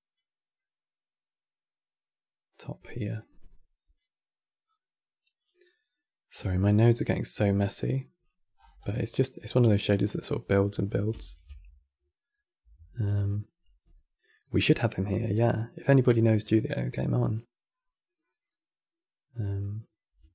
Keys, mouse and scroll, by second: 0.3-2.9 middle drag, 2.9 click, 4.4 click, 5.3 middle click, 6.0 scroll down 9, 6.2-8.3 middle drag, 8.3-8.6 scroll up 11, 8.6-10.9 middle drag, 10.9 ctrl+shift+click, 18.1-19.2 middle drag, 19.2 scroll down 2, 20.0-20.3 shift+middle drag.